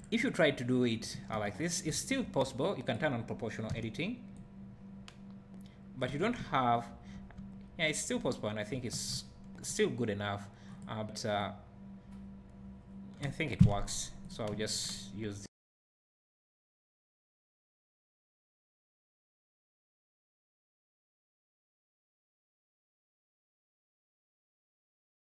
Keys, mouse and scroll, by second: 1.3 1, 1.6 click, 2.8 click, 3.7 o, 4.3-7.4 drag, 6.1 Tab, 6.4 `, 8.0 click, 8.7 Tab, 9.1 `, 10.0 click, 11.4-12.6 drag, 13.7 click, 14.5 `, 15.5-20.9 drag, 16.3 Tab, 18.1 Tab, 18.4 `, 18.8 Tab, 19.6 `, 21.4-25.3 drag, 22.6 Tab.